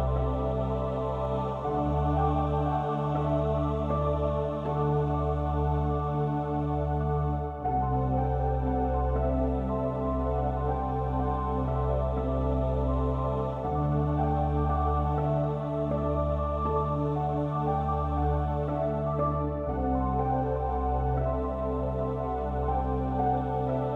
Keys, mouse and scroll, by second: 0.8 a, 2.0 click, 2.0 right click, 3.0 click, 3.3-4.9 middle drag, 4.9 right click, 5.5-6.9 middle drag, 6.9 a, 7.8 a, 10.2 click, 11.1-13.4 middle drag, 13.4 ctrl+r, 16.9-18.1 drag.